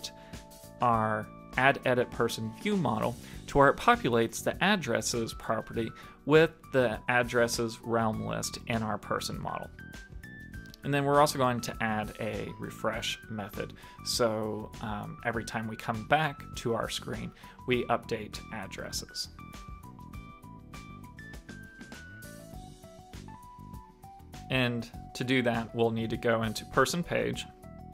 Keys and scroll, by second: 2.0 super+s, 19.8 shift+super+Left, 20.1 super+c, 22.4 super+v, 22.8 super+s.